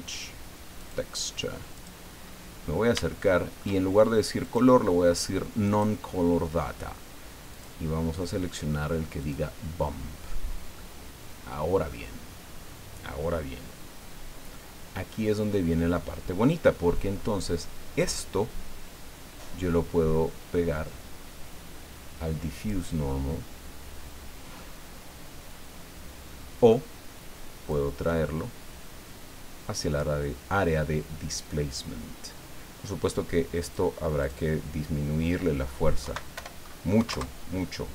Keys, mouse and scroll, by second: 0.8 click, 1.7 click, 2.1-2.6 scroll up 1, 3.0 shift+click, 4.4 click, 5.6 click, 7.5 click, 9.2 click, 10.7-12.0 middle drag, 14.5-16.1 middle drag, 18.2-22.9 drag, 24.5-26.9 middle drag, 27.7-30.1 drag, 33.6 click, 34.2 click, 36.0 Right, 36.4 BackSpace, 36.9 KP_1, 37.1 KP_Enter.